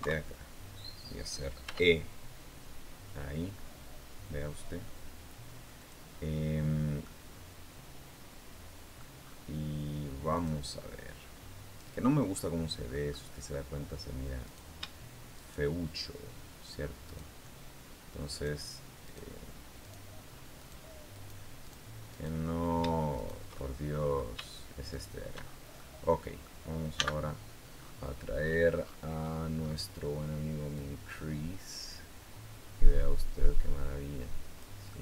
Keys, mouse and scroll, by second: 1.5 e, 5.6 click, 6.8-8.9 middle drag, 8.9-9.3 scroll up 1, 10.1 click, 11.7-12.1 scroll down 1, 12.1-13.5 middle drag, 14.2 right click, 15.1 shift+right click, 16.9 shift+right click, 18.1 shift+right click, 18.8 shift+right click, 19.6 shift+right click, 20.4 shift+right click, 20.9 shift+right click, 21.4 shift+right click, 21.9 shift+right click, 22.9 shift+right click, 23.3 shift+middle click, 24.7 shift+right click, 25.2 shift+scroll down 1, 25.5 shift+middle click, 26.7 n, 27.5-29.8 scroll up 5, 30.5-34.7 drag, 34.7 middle click, 34.7-35.0 drag.